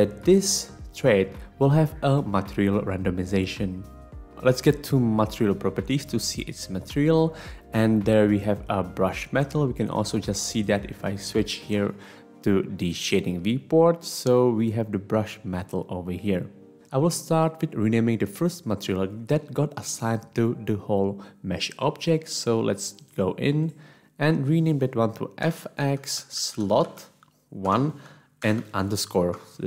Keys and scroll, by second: 25.4-27.7 typing, 29.4 Return, 29.4 typing.